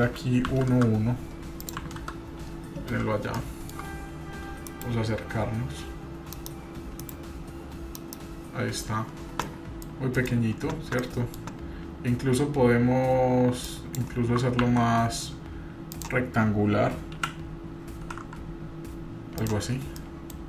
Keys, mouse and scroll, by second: 1.6 click, 3.2 scroll up 2, 3.4 shift+middle click, 3.9-4.4 scroll up 1, 4.7 KP_Divide, 5.5-6.2 scroll down 1, 8.6 scroll down 3, 9.4-10.2 middle drag, 10.5-11.0 scroll down 3, 11.0-11.4 middle drag, 11.5 scroll up 2, 12.9-13.7 scroll up 6, 13.7-14.0 drag, 14.6 ctrl+z, 15.6-16.3 shift+drag, 17.2 g, 19.7-20.4 scroll down 10, 20.0-20.3 middle drag.